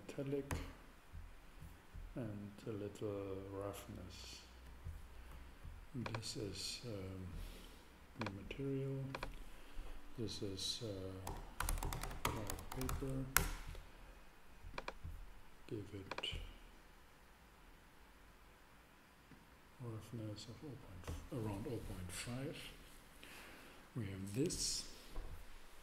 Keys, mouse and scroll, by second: 1.5-2.6 middle drag, 2.6-4.4 drag, 6.1 super+right click, 7.9 super+middle click, 11.3-12.9 typing, 13.3 Return, 14.7-16.6 drag, 19.3-21.0 drag, 21.3-22.6 middle drag.